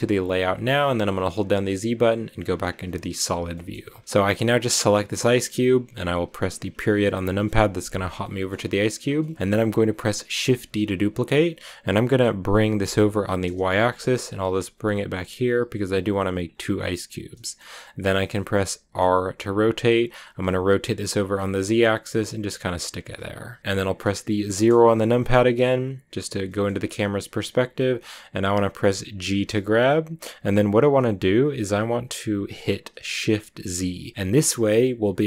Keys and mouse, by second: 0.7 z, 3.4 shift+middle click, 7.2 KP_Decimal, 8.3-8.9 middle drag, 9.1 shift+middle drag, 10.5 shift+d, 15.0 y, 17.2-18.7 drag, 18.7 r, 20.3 z, 22.6-23.9 drag, 24.5 KP_0, 26.2 shift+middle drag, 29.2 g, 34.1 g, 34.1 shift+z.